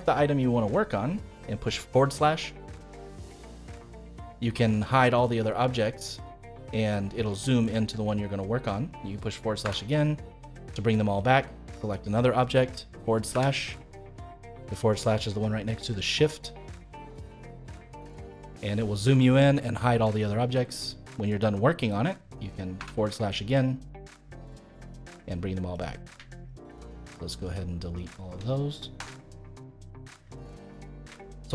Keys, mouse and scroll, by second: 0.3-1.8 middle drag, 1.8-2.3 scroll down 1, 2.3 middle click, 3.0-3.4 scroll down 2, 3.4-5.2 middle drag, 5.2-5.5 scroll down 2, 5.5-7.2 middle drag, 7.2-7.6 scroll up 1, 7.6-8.4 scroll down 5, 8.4-9.6 scroll up 2, 9.6 /, 10.7-11.8 middle drag, 11.8 click, 13.3 /, 14.6-17.6 middle drag, 17.6-18.0 scroll down 2, 18.0-20.3 middle drag, 20.3-21.1 scroll down 2, 21.1-22.7 middle drag, 22.7 /, 23.8-25.7 middle drag, 25.7 click, 26.4 shift+click, 26.9 shift+click, 27.4 shift+click, 27.9 shift+click, 28.9 Delete, 29.9-30.2 scroll down 1, 30.2 middle click, 30.8-31.2 scroll up 2, 31.2-31.5 shift+middle drag.